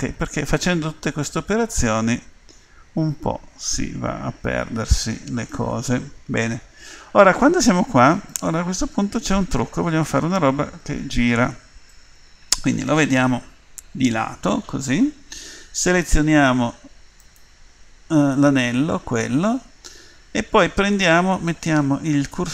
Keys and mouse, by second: 0.8 middle click, 1.4-2.5 middle drag, 2.5 click, 7.7-13.5 middle drag, 13.5 KP_1, 17.2-22.5 right drag.